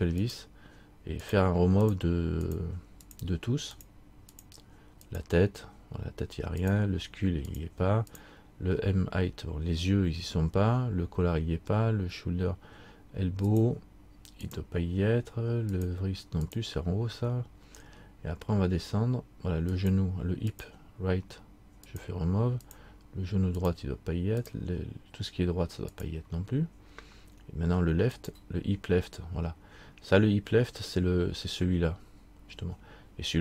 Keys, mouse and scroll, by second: 5.8-6.8 scroll down 1, 6.8 click, 10.1-11.4 scroll down 1, 13.6 click, 15.9 click, 17.2-19.8 scroll down 1, 19.9 click, 26.6-28.3 scroll down 1, 28.3 click, 29.3-29.8 scroll down 1.